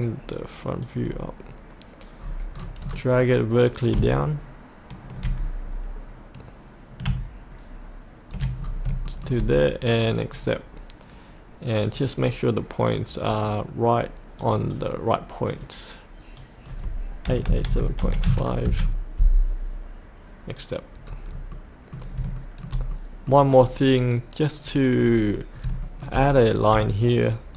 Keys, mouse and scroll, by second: 0.8 click, 2.0 click, 2.2-2.6 scroll down 1, 3.7-6.0 drag, 6.1-8.6 ctrl+drag, 8.6 scroll up 1, 9.0 shift+middle click, 10.2 click, 17.2 KP_8, 18.0 KP_Decimal, 18.2 KP_5, 20.6 click, 21.1-21.5 scroll up 1, 21.5 middle click, 22.3 shift+middle click, 22.9 middle click, 23.6-24.5 scroll down 1, 24.5 click, 25.0-25.5 scroll down 1, 25.5 scroll up 1, 25.8 shift+middle click, 26.8 shift+click.